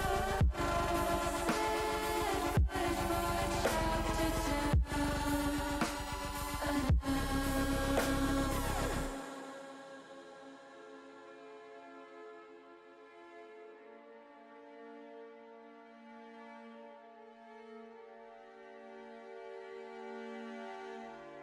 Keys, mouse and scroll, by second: 1.6 ctrl+z, 3.3 ctrl+r, 4.3 ctrl+click, 7.0 click, 7.6 alt+shift+click, 8.0 alt+shift+click, 8.8 click, 9.4 click, 9.9 click, 10.1 click, 11.2 shift+click, 11.9 shift+click, 13.5 alt+shift+s, 16.8 click, 17.6 ctrl+z, 19.6 ctrl+r, 20.4 ctrl+click, 21.0 ctrl+r.